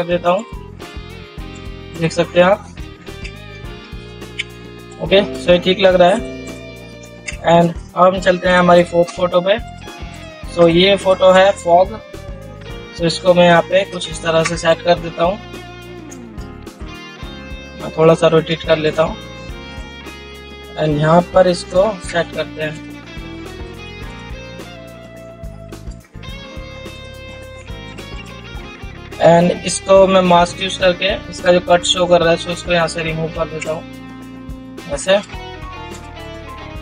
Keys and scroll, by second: 3.6 ctrl+0, 7.5 ctrl+0.